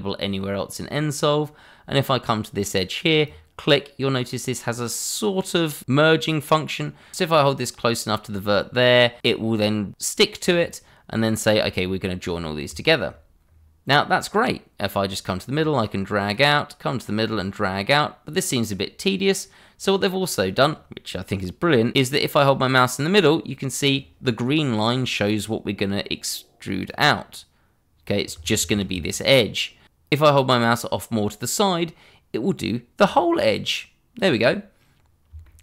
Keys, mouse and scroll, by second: 3.2 click, 12.2-12.7 scroll down 1, 12.8 shift+middle click, 12.9 middle click, 12.9 shift+middle click, 13.4-15.5 scroll up 1, 15.5 click, 26.9 click, 28.6 ctrl+z, 33.0 click, 35.0 scroll down 1, 35.4 shift+middle click.